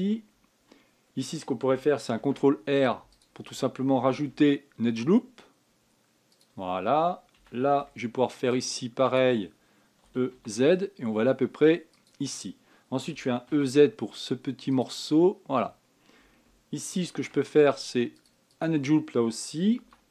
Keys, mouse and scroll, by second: 2.9 ctrl+r, 5.0 s, 8.1 a, 8.5 b, 10.8 e, 13.9 e, 17.8 ctrl+r.